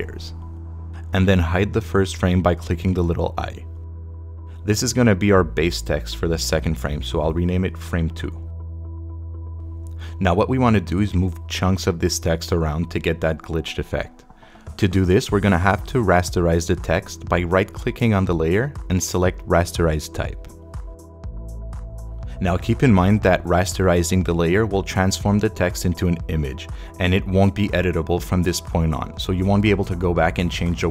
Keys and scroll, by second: 7.7-9.5 typing.